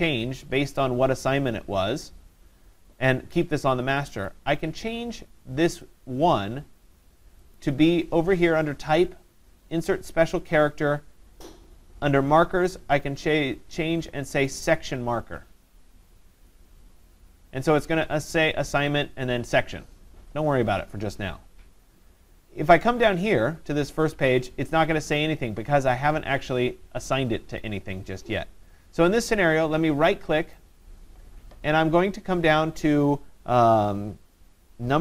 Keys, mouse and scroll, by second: 4.1 click, 4.3 click, 5.9 click, 7.6 click, 16.5 click, 23.0 click, 23.3 click, 30.6 right click.